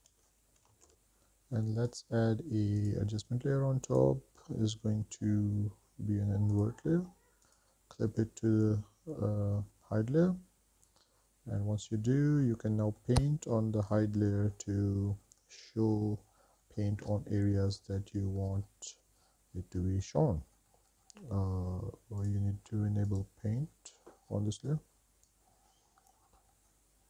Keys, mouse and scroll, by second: 2.1 click, 3.0-4.3 drag, 6.7 click, 7.6 click, 12.8 middle click, 14.1 click, 15.5 middle click, 15.8 middle click, 16.6-17.1 scroll up 2, 17.1 middle click, 17.4 scroll down 1, 17.5 shift+middle click, 18.3-20.5 middle drag, 20.8 scroll up 2, 21.0-21.5 scroll down 2, 21.5 drag, 21.8 click, 22.5-24.1 drag, 24.2 shift+middle click, 24.5 shift+middle click, 25.2-27.0 drag.